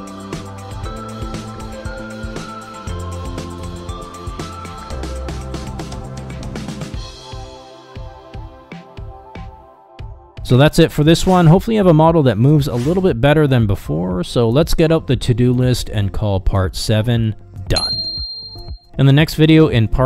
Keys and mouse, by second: 1.9 KP_0, 8.5-9.2 middle drag, 9.5-10.1 middle drag, 10.4-11.1 middle drag, 13.7 a, 14.0 alt+r, 14.1 alt+g, 14.4 shift+drag, 15.4 g, 16.0 r, 16.4 g, 17.2 middle click, 18.0 ctrl+KP_3, 19.5 g.